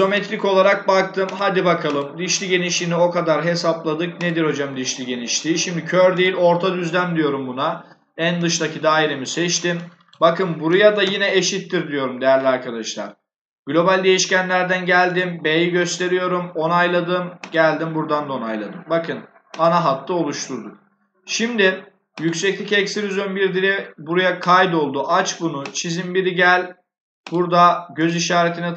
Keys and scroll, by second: 10.9 shift+0.